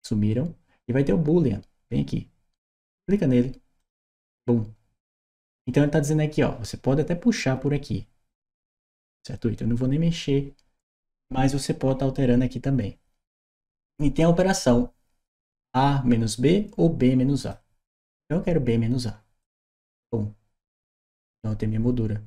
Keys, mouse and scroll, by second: 3.6 shift+click, 17.2 shift+click, 19.2 shift+click.